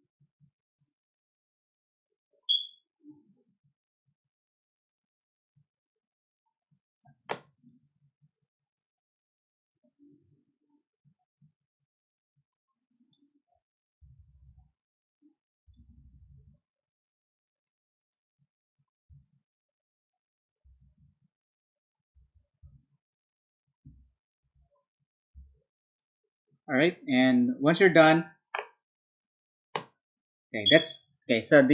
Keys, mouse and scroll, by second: 2.2-6.9 drag, 7.6-13.1 drag, 14.7 click, 16.5-18.0 drag, 18.9 click, 22.1 9, 23.8 l, 25.3 b, 25.9-27.9 drag.